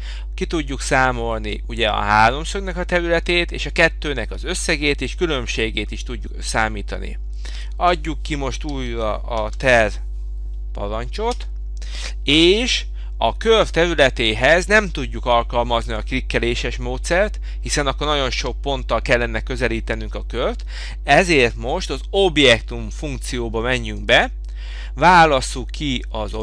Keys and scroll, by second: 11.4 Return.